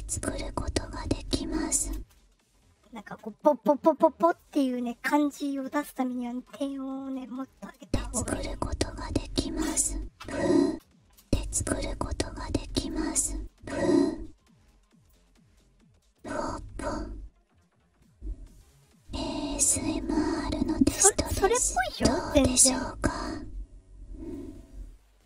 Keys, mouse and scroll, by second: 1.9 space, 7.7 space, 10.6-12.8 drag, 10.6 space, 11.1 space, 13.4-15.0 drag, 16.1 click, 23.1 click, 24.2-25.2 drag.